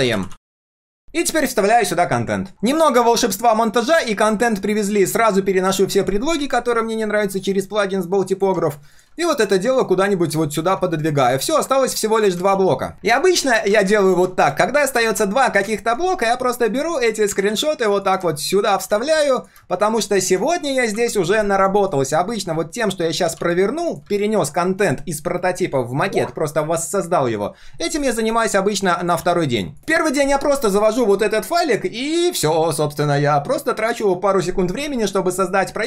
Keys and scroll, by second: 5.9 ctrl+/, 12.5 ctrl+s, 17.5 ctrl+c, 18.8 ctrl+v, 23.4 ctrl+c, 29.2 ctrl+v.